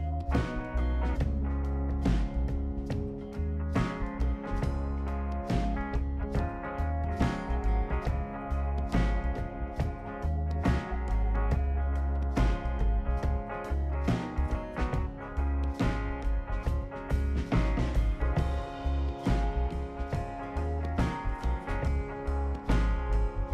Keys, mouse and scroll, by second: 0.2 click, 0.8 click, 1.6 ctrl+click, 4.4 click, 5.0-5.5 scroll down 4, 5.7-6.2 right drag, 9.2 click, 10.1-11.1 scroll down 4, 11.4-11.9 right drag, 14.6 click, 17.3 click, 20.5 click, 22.0 click, 23.3 click.